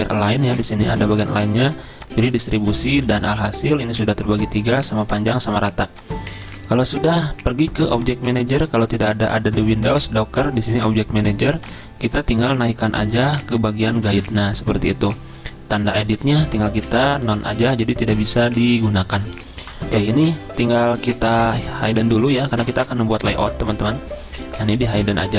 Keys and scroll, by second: 2.9 z, 17.4 z.